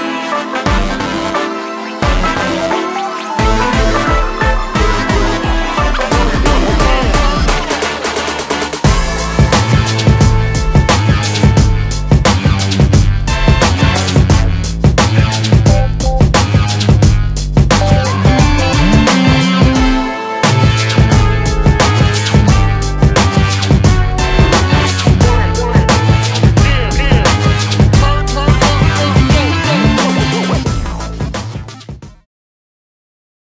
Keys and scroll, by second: 4.8 e, 7.3 shift+space, 7.4 Escape, 26.7 space, 26.8 Escape, 27.4 space, 27.5 Escape.